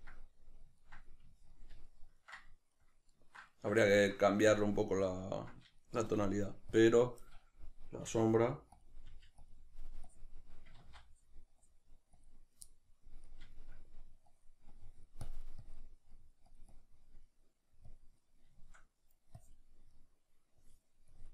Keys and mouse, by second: 8.1 f, 8.8 click, 9.1 f, 9.5 click, 10.8 ctrl+z, 10.8-12.7 drag, 12.7-14.3 middle drag, 14.3-17.3 drag, 17.3 middle click, 17.9 click, 18.5 shift+middle click, 19.4 click, 19.9 middle click, 20.6-21.3 drag.